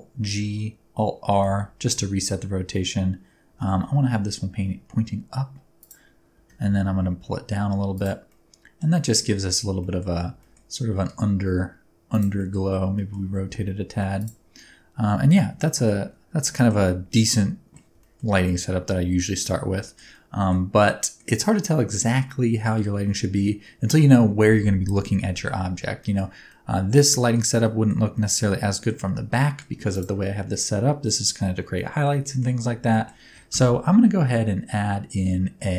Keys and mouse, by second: 0.2 alt+g, 1.2 alt+r, 3.5 r, 3.7 y, 5.7 ctrl+click, 6.3 g, 6.6 z, 7.9 click, 8.2-8.8 middle drag, 9.1 middle click, 9.9 middle click, 10.3 g, 10.4 middle click, 12.1 click, 12.4 middle click, 12.9 middle click, 13.2 r, 13.4 x, 14.1 click, 14.5-15.3 middle drag, 15.7 shift+middle click, 16.6 shift+middle click, 16.8-17.7 middle drag, 18.0 shift+middle click, 18.3-19.4 middle drag, 20.1-20.5 middle drag, 20.9 middle click, 22.0-22.8 middle drag, 26.0 shift+middle click, 26.6-27.3 middle drag, 27.7 middle click, 28.1 middle click, 29.4 middle drag, 29.9 click, 31.7-32.0 middle drag, 32.2 shift+middle drag, 32.9 shift+middle click, 33.5 shift+a.